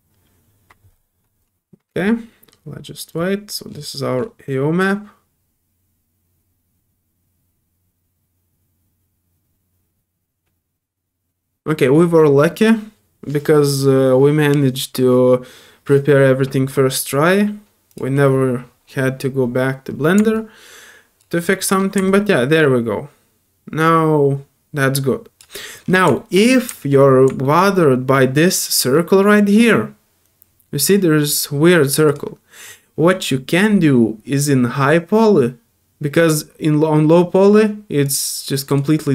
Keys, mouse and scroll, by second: 0.3 typing, 3.8 middle click, 17.2 right click, 17.9 click, 19.9 middle click, 19.9 scroll up 2, 20.3 alt+click, 21.4 alt+middle click, 21.8 alt+scroll down 4, 22.1-25.4 alt+drag, 25.6 alt+middle click, 26.1 alt+middle click, 26.4-26.7 alt+scroll up 4, 26.7 alt+middle click, 27.4 alt+middle click, 32.1 click, 33.0 scroll up 2, 38.0 click, 38.7 click.